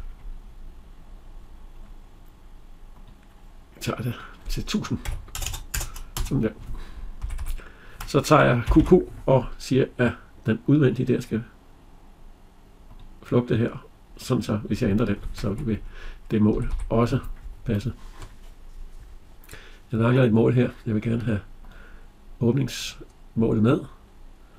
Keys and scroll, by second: 6.0 Return, 7.1 Escape, 16.4 Escape.